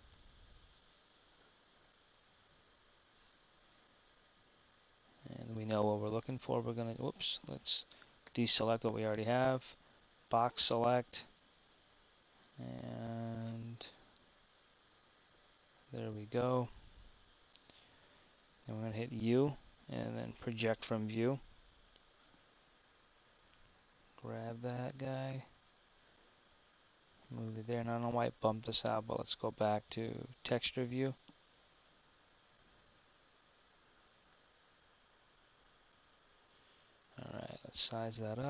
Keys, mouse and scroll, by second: 0.8 z, 8.3 a, 24.3 g.